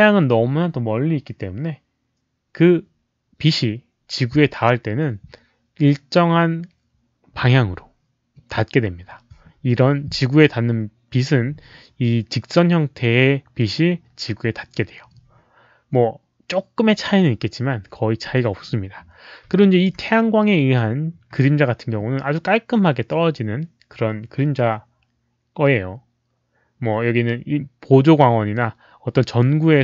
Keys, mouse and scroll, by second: 0.0-0.1 typing, 19.5 alt+drag.